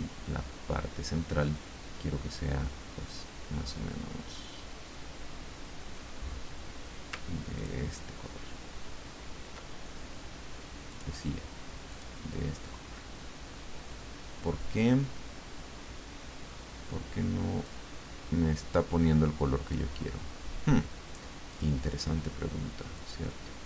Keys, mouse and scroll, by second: 7.5 ctrl+click, 10.9 click, 11.9 click, 17.6-19.9 drag, 21.5 click, 22.9 click.